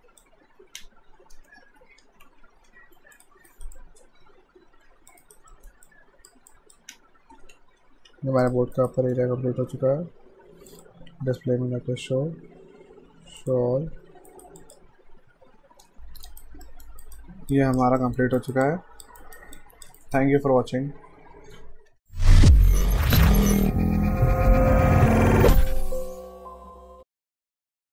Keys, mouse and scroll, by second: 2.2 alt+shift+h, 3.2 click, 3.5 alt+right click, 3.8 alt+click, 5.2 alt+right click, 5.5 alt+middle click, 5.9 alt+click, 7.1 alt+shift+d, 7.5 ctrl+s, 8.4 click, 8.8 alt+right click, 9.0 alt+middle click, 10.7 click, 13.4 click, 14.3 alt+right click, 14.6 alt+click, 15.9 F5, 16.1 alt+Num_Lock, 16.3 alt+right click, 16.7 alt+middle click, 17.0 alt+right click, 17.5 alt+click, 18.0 alt+middle click, 18.4 alt+right click, 18.6 alt+click, 19.2 alt+right click, 19.5 alt+click, 20.0 alt+right click, 21.9 F5.